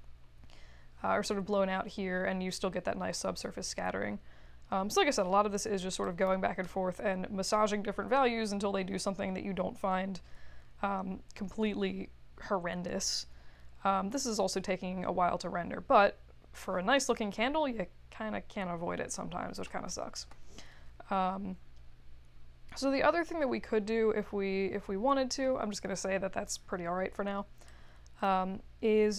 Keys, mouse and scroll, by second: 3.2 1, 3.4 Return, 6.1 click, 27.6-28.2 drag.